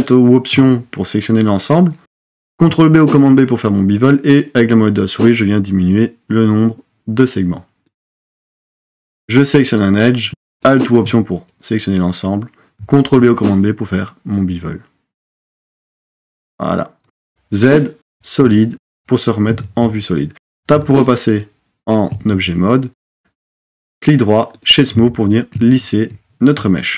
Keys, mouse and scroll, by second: 2.5 super+b, 9.3 click, 13.0 super+b, 17.1 z, 19.5 Tab, 24.1 right click.